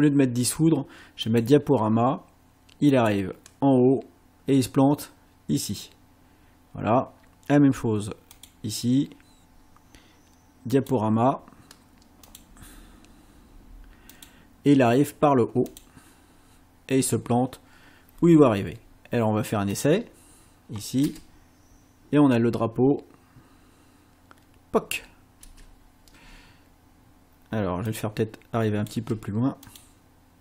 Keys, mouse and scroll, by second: 1.3 click, 2.9 click, 8.3 click, 10.7 click, 12.3 click, 14.1 click, 15.7 click, 19.7 click, 21.1 space, 25.5 space, 27.9-29.1 drag, 29.7 click.